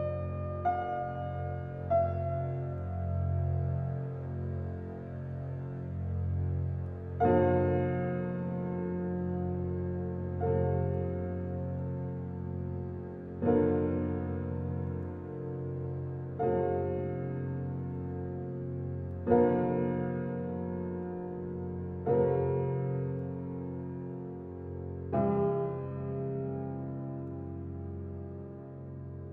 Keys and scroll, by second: 0.1 Left, 2.9 Left, 5.6 Left, 7.3 Left, 9.6 Left, 10.8 Left, 12.6 Left, 13.9 Left, 15.2 Left, 17.0 Left, 18.9 Left, 20.7 Left.